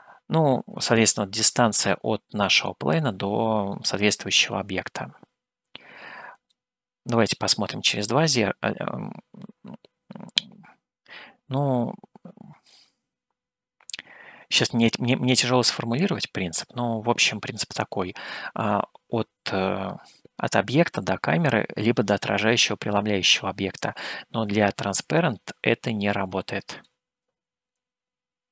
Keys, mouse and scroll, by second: 3.8-19.8 middle drag, 22.8-26.8 middle drag.